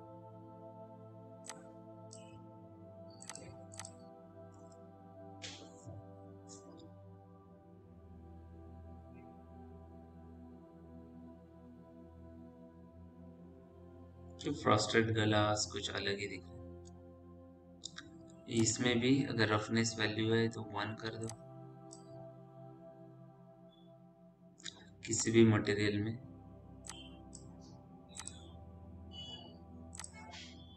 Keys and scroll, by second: 4.9 shift+q, 17.2 m.